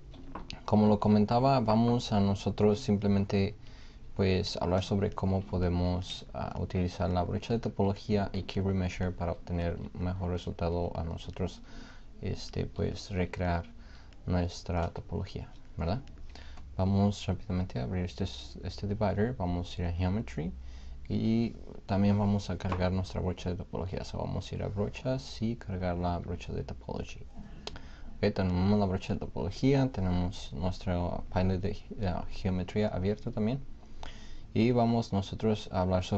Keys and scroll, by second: 0.9 n, 2.8 b, 4.9 '.